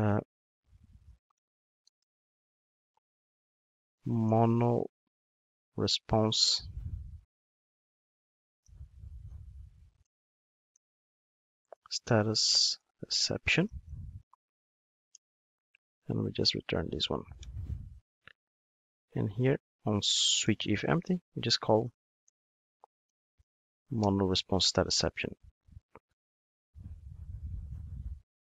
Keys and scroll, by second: 15.3 super+v, 24.0 Return.